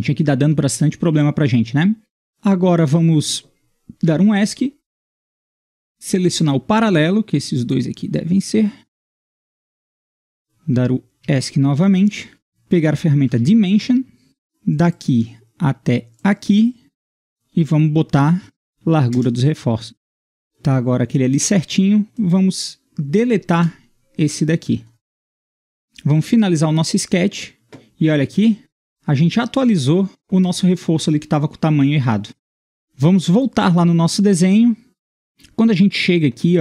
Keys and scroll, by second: 3.9 Escape, 11.2 Escape, 13.3 typing, 18.0-19.1 typing, 19.1 Return, 19.9 Return, 23.5 Delete.